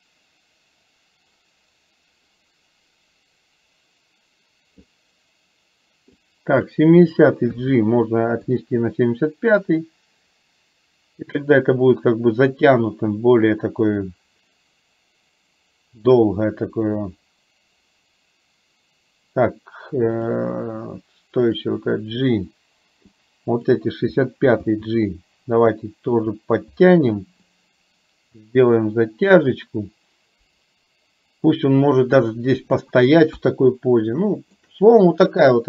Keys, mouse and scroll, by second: 6.1 click, 7.6 g, 9.6-20.4 drag, 21.5 click, 23.2 click, 24.7 g, 27.6-32.9 drag, 33.4 KP_1, 34.2 shift+middle click.